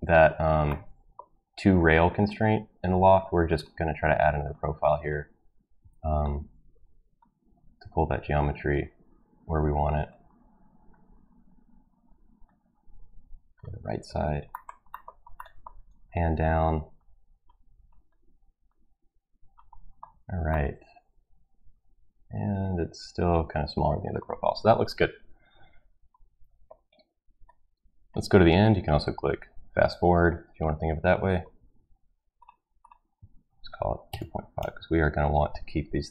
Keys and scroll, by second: 5.8 Escape, 33.5 ctrl+v, 33.8-35.1 typing.